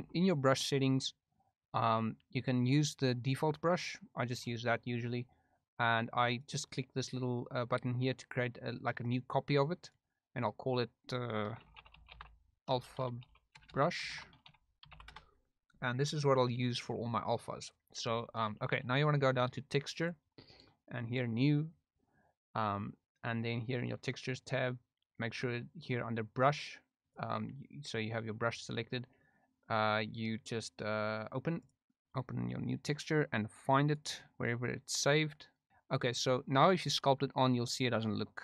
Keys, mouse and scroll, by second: 0.0 t, 6.1 click, 10.3-15.9 drag, 13.7 BackSpace, 21.1 click, 26.6 click, 31.7 click, 37.1 click, 38.2 middle click.